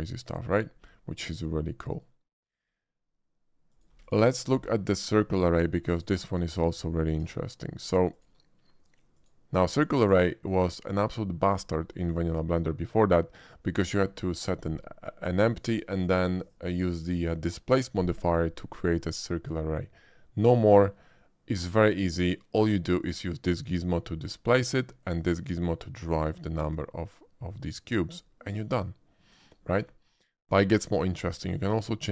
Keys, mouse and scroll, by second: 0.9-2.0 middle drag, 3.7 click, 3.9 x, 4.0 click, 4.5 shift+a, 5.9 click, 6.8 shift+middle drag, 8.1 shift+click, 9.1 shift+click, 10.4 click, 11.1 click, 20.7 shift+middle click, 21.2-21.6 shift+middle drag, 23.0-24.5 shift+drag, 25.1-28.2 drag, 30.1 middle drag, 30.9 shift+middle click, 31.3 shift+middle click.